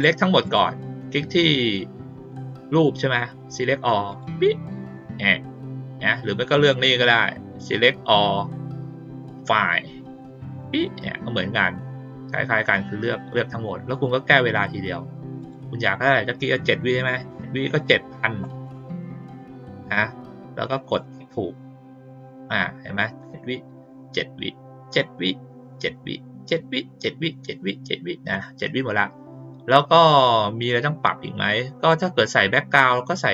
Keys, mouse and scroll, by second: 0.4 click, 4.0 click, 6.5 click, 10.5 click, 15.3 click, 20.8 click.